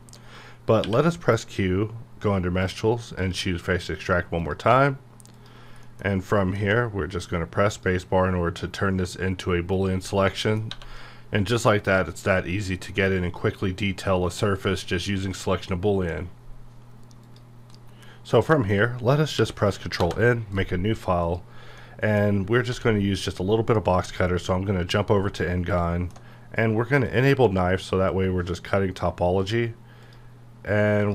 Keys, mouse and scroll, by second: 0.8 q, 3.2 click, 5.8 middle click, 6.1-6.6 scroll up 1, 6.6 space, 7.7 click, 7.7 click, 10.1 scroll down 1, 10.3 middle click, 10.7 1, 11.0-17.3 middle drag, 18.8 ctrl+Num_Lock, 18.8 scroll up 1, 20.0 Return, 20.5 KP_Decimal, 21.2 click, 21.8 middle click, 22.7 d, 24.3 click, 25.1 scroll down 1, 25.4-27.0 middle drag, 27.0 click.